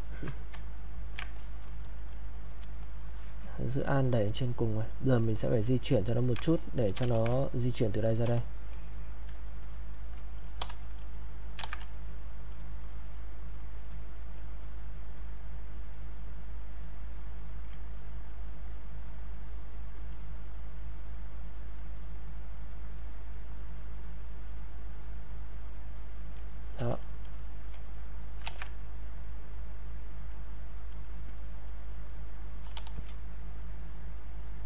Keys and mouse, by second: 0.7 ctrl+right click, 1.3 alt+click, 1.6 click, 3.0 alt+click, 4.2 click, 5.3 alt+click, 5.8 ctrl+right click, 6.5 ctrl+alt+click, 7.2 ctrl+1, 7.5 click, 9.6-11.6 alt+drag, 11.6 ctrl+z, 12.0 click, 12.9 alt+click, 14.1-15.8 drag, 15.8 alt+click, 16.9 alt+click, 18.1-23.0 drag, 23.0-26.7 drag, 26.7 q, 27.5 alt+click, 28.4 ctrl+z, 31.2-32.8 drag, 32.8 e, 33.1 click, 34.4 click.